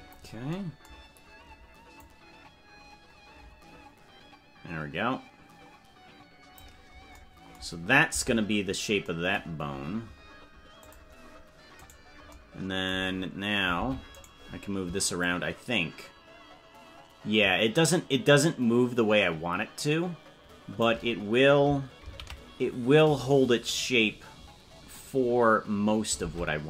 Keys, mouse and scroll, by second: 2.0-6.6 drag, 8.2 Tab, 8.6-9.2 scroll down 3, 10.8 click, 11.9 right click, 13.8 ctrl+Tab, 14.2 right click, 15.2-21.4 shift+drag, 23.0 ctrl+z, 26.4 ctrl+Tab.